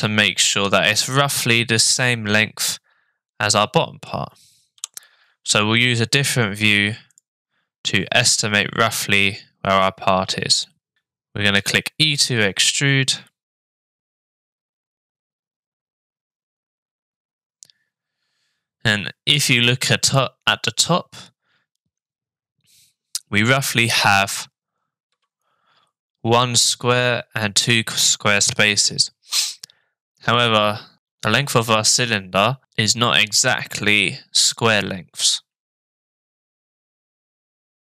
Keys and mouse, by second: 1.1 middle click, 3.5 middle click, 11.6 e, 35.9-37.8 middle drag.